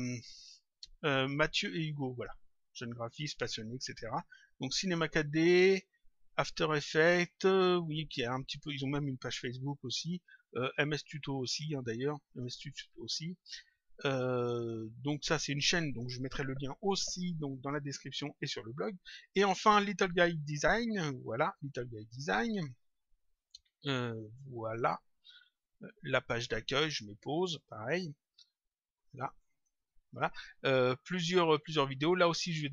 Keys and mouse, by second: 10.7 click, 12.2 click, 20.5 click, 23.8 click, 27.3 click, 29.1 click, 32.1 click.